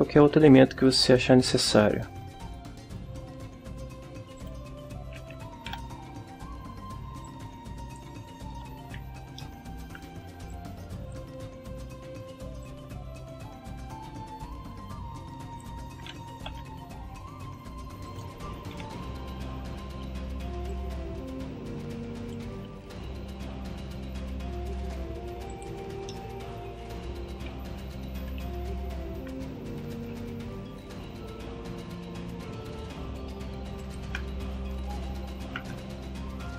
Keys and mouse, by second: 0.9 shift+a, 4.3 click, 4.7-5.9 middle drag, 5.7 KP_1, 7.2 click, 8.5 KP_5, 9.4 ctrl+middle click, 10.5 click, 12.6-15.8 ctrl+drag, 16.3 ctrl+r, 18.1 ctrl+click, 18.7 ctrl+KP_7, 20.7-22.5 ctrl+drag, 22.9 ctrl+r, 25.5 ctrl+click, 26.1-27.1 ctrl+middle drag, 27.5 KP_1, 30.0 g, 33.8 ctrl+click, 34.4 ctrl+KP_3, 35.6 g.